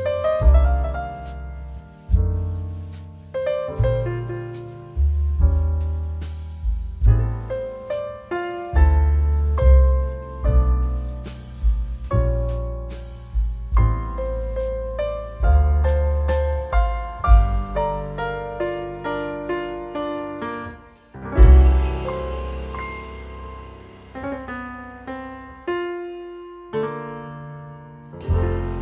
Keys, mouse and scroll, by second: 6.3 ctrl+z, 7.3-9.3 drag, 9.3 space, 9.5 click, 9.8 space, 10.8-19.7 drag, 19.8 space, 20.0 click, 20.3 space, 20.8 j, 21.6 click, 23.5 x, 23.7 click, 25.6 x, 26.6 click, 27.6-28.8 typing, 27.8 click, 28.1 click, 28.7 click.